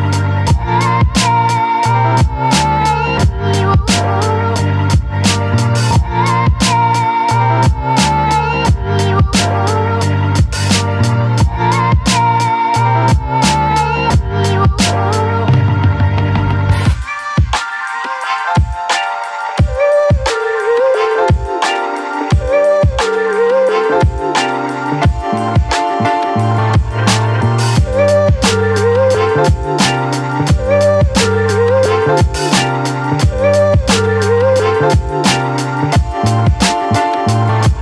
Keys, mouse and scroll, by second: 34.7 click.